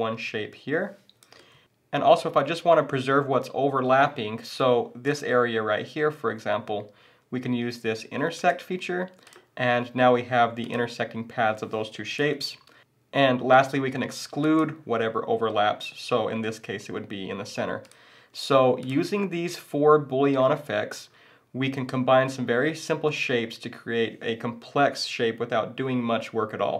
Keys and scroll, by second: 1.5 super+z, 12.3 super+z.